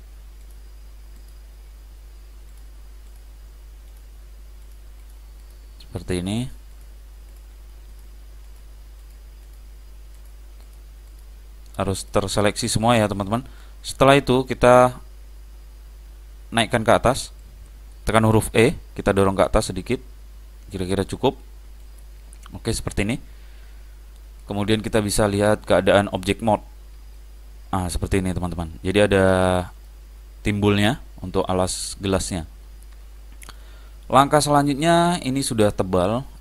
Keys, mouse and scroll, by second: 6.5 shift+e, 13.7-15.5 middle drag, 15.6-16.7 scroll down 1, 16.7-18.5 middle drag, 18.6 e, 22.6-24.4 middle drag, 25.7 click, 26.4 click, 27.2-29.0 middle drag, 31.3-33.2 middle drag.